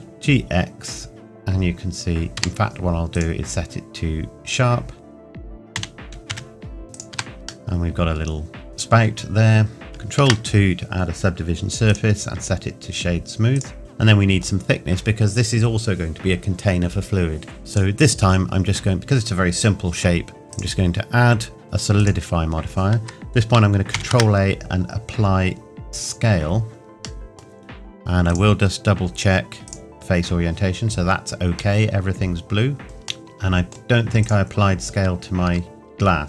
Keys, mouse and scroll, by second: 1.1-1.4 scroll down 1, 2.4 Escape, 3.1 click, 5.7 g, 6.8 scroll down 1, 6.9 click, 7.1 Tab, 7.7 middle click, 9.7 scroll down 1, 11.9 right click, 13.5 click, 13.8-14.1 scroll up 1, 14.1 middle click, 17.7 click, 20.5 click, 21.9 click, 26.0 click, 27.2 middle click, 28.3 click, 31.7 middle click, 32.8 click, 33.3 middle click, 34.2 click.